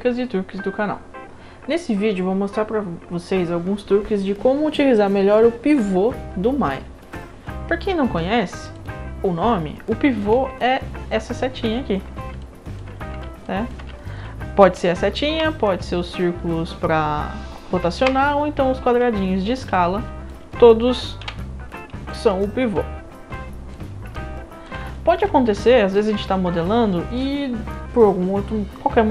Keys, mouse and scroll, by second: 8.6 click, 10.1 scroll up 1, 10.6-11.1 alt+drag, 12.4-12.8 alt+drag, 13.4 alt+drag, 14.0 alt+middle click, 15.3 e, 18.0 r, 19.7-20.3 drag, 21.2 w, 22.1-23.7 drag, 24.1-24.7 alt+drag, 24.9 alt+middle drag, 25.4 middle click, 25.6-25.9 alt+drag, 26.3 alt+middle drag.